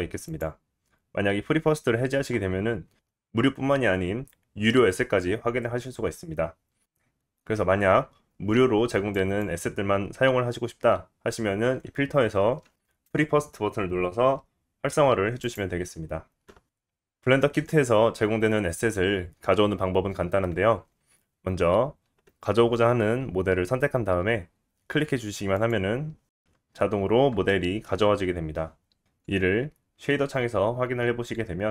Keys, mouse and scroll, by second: 9.8-27.8 drag, 27.8-28.9 scroll up 8, 30.5 click.